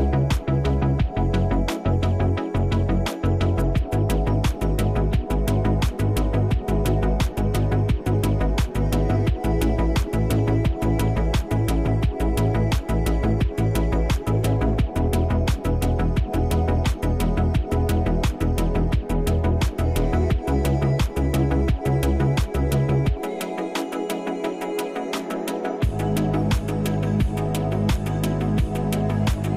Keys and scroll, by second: 1.4 space, 2.5 space, 11.1 space, 12.5 space, 21.9 ctrl+z, 29.4 space.